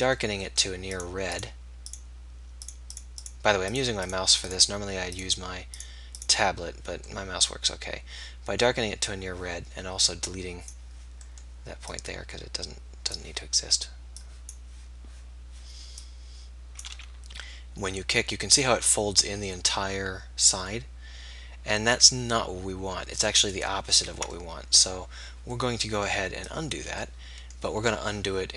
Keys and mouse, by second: 17.4 r, 18.1-24.5 middle drag, 24.0 ctrl+z, 24.5-28.5 drag.